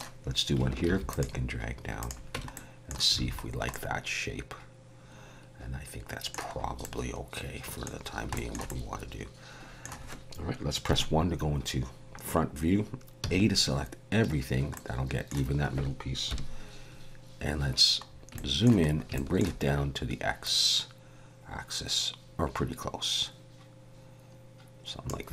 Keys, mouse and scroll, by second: 0.8 ctrl+r, 2.3 Tab, 2.5 middle click, 3.2 alt+a, 3.4 scroll down 2, 3.7 middle click, 6.6 scroll up 1, 6.8 middle click, 8.0 scroll down 2, 8.3 shift+middle click, 8.7 middle click, 10.9 KP_1, 13.2 a, 14.7 middle click, 16.3 KP_1, 18.1 scroll up 3, 18.3 shift+middle click, 18.9 scroll up 2, 19.1 shift+middle click, 20.4 click.